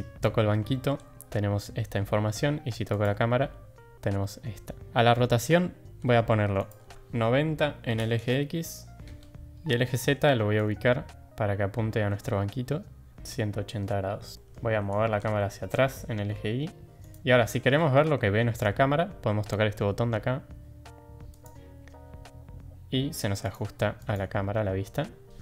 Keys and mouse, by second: 2.8 click, 6.7-9.0 drag, 9.5 ctrl+z, 10.7-13.1 drag, 13.2-13.7 middle drag, 14.3 middle click, 14.8 g, 17.2 shift+middle click, 17.7 middle click, 21.3 click, 23.5 click, 23.9 click.